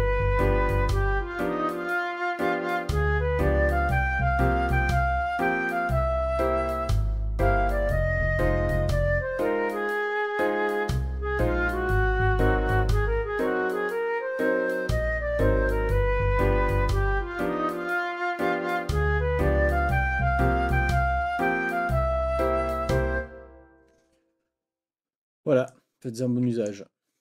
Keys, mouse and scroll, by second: 26.1 click, 26.3 click, 26.7 click.